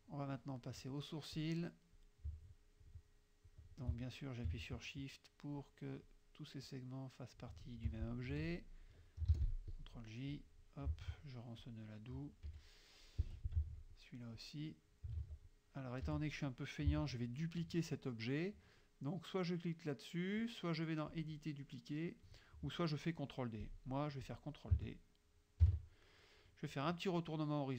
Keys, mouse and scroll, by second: 1.4 click, 2.5 shift+click, 3.5 shift+click, 5.7 shift+click, 6.7 shift+click, 8.3 shift+F2, 8.5 click, 9.4 shift+j, 9.7 shift+click, 10.4 click, 11.0 ctrl+click, 11.7 ctrl+click, 12.5 F1, 13.3 F2, 13.7 ctrl+click, 14.0 ctrl+click, 14.5 ctrl+click, 15.2 ctrl+z, 15.5 ctrl+click, 16.1 F1, 21.2 click, 23.7 click, 24.3 click, 25.7 ctrl+d.